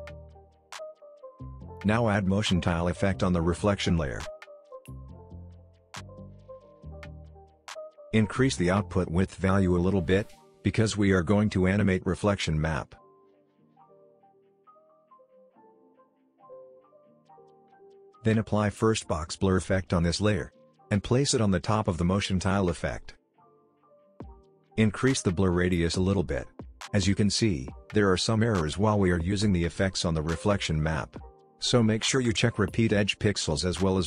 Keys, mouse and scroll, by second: 3.2 ctrl+space, 3.8-5.1 typing, 5.2 Return, 9.9-11.0 drag, 18.2 ctrl+space, 19.1-20.1 typing, 21.3-23.4 drag, 25.7-26.5 scroll up 1, 26.5-28.4 drag, 30.5-32.0 scroll down 1, 32.6 click.